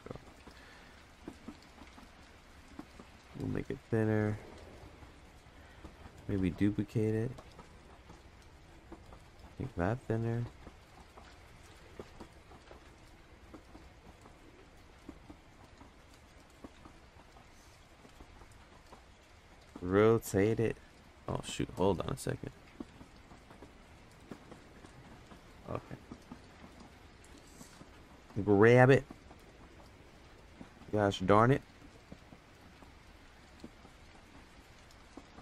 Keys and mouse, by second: 0.0 n, 3.4 alt+s, 6.3 shift+d, 9.7 alt+s, 10.5 Tab, 16.4 Tab, 19.8 r, 30.9-32.2 drag, 32.6 g.